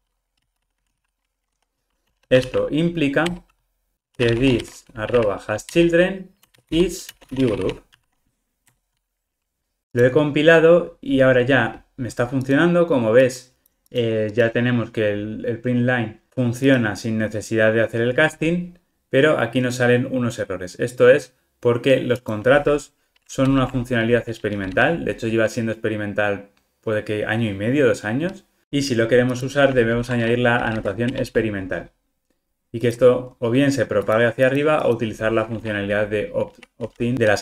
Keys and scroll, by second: 5.7 Return, 28.6 super+z, 29.9 alt+Return.